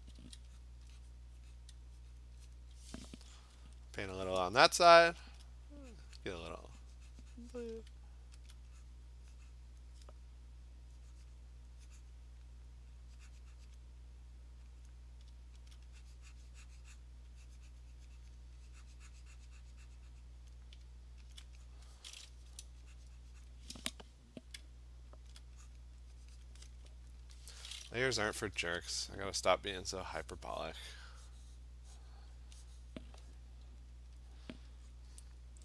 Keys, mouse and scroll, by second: 0.0-0.2 typing, 0.6 click, 1.2 click, 1.6 click, 2.2 click, 2.6 click, 5.4 alt+click, 6.0 alt+click, 6.3 click, 7.8 click, 8.5 alt+click, 9.8 click, 11.4 click, 12.4 click, 13.5 alt+click, 13.8 click, 14.5 right click, 14.9 click, 15.0 click, 15.7 alt+click, 15.8 alt+click, 17.0 click, 18.4 click, 20.5 click, 21.4 alt+click, 21.8 click, 21.9 click, 22.0 alt+click, 22.6 click, 23.0 alt+click, 23.5 click, 23.5 alt+right click, 25.3 alt+right click, 25.7 click, 26.5 click, 28.7 ], 28.9 ], 30.4 alt+right click, 30.4 click, 32.1 click, 33.0 click, 34.1 click, 34.3 click, 34.9 click, 35.5 click.